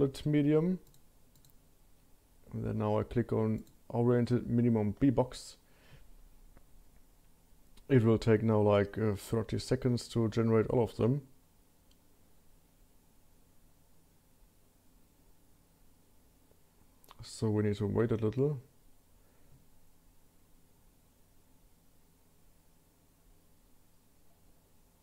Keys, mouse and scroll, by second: 3.6-25.0 drag.